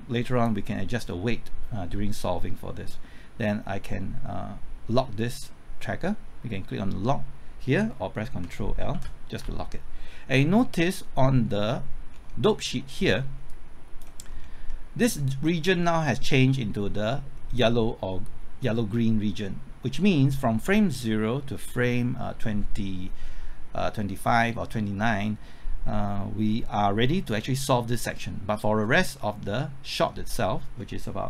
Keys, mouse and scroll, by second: 8.9 ctrl+l, 12.1 scroll down 1, 12.5 scroll up 1, 13.5 click, 14.2 scroll up 1, 14.7-15.8 middle drag, 30.0 scroll down 1, 30.3 middle click.